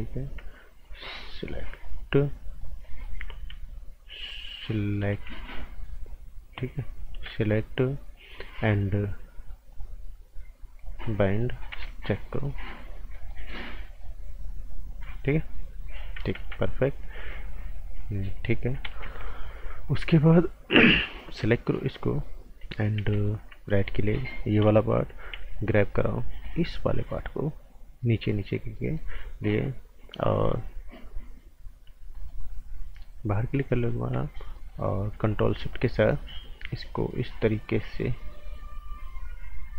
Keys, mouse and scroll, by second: 1.1 scroll down 1, 1.2 right click, 1.8 click, 2.8 right click, 5.4 ctrl+shift+click, 9.7 click, 11.0 scroll down 1, 11.2 right click, 11.7 z, 12.3 click, 12.9 scroll down 1, 13.1 right click, 13.9 click, 16.4 ctrl+z, 17.1 click, 18.8 ctrl+z, 19.1-19.6 scroll up 2, 19.2 right click, 19.7 right click, 21.9 click, 22.9 v, 23.7 alt+right click, 24.0-25.3 scroll down 1, 25.3 g, 26.1 click, 28.5 scroll up 1, 28.7 right click, 29.1-30.0 scroll up 1, 30.0 scroll down 1, 30.2 right click, 31.8 scroll down 1, 32.1 right click, 32.4-33.6 scroll down 1, 35.3 ctrl+shift+click.